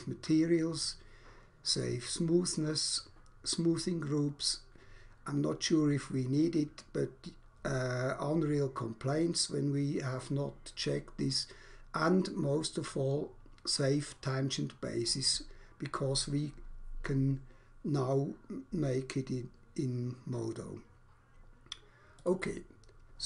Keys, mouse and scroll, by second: 22.0 click.